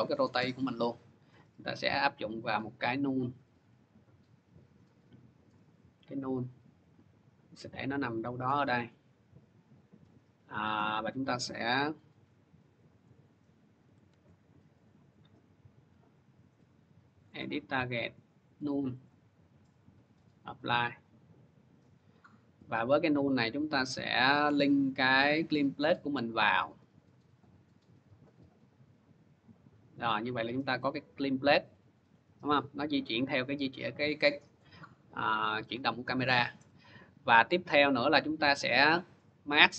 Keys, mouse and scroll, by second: 1.2 click, 1.7 click, 3.4 click, 7.8 click, 8.6 click, 10.9 click, 12.9 click, 13.9 ctrl+z, 15.7 click, 17.1 click, 17.9 click, 18.4 click, 19.0 click, 20.0 click, 20.9 click, 22.6 scroll, 25.3 click, 27.2 click, 28.1 click, 34.3 click, 35.5-36.2 scroll, 36.2 middle click, 36.4 middle click, 38.2 click.